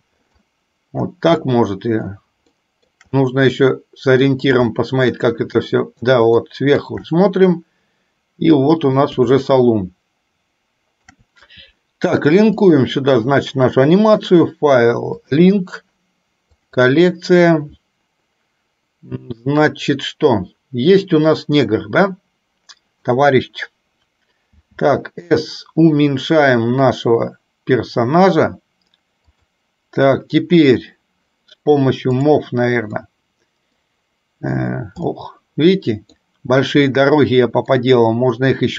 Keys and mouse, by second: 1.6 shift+middle click, 2.6 shift+middle click, 3.3-4.4 middle drag, 4.8 shift+middle click, 5.6 shift+middle click, 6.4 shift+middle click, 7.2-9.1 middle drag, 9.4-11.3 shift+middle drag, 12.8-15.7 drag, 24.7 s, 33.2 middle click, 35.2-36.3 middle drag, 36.9 middle click.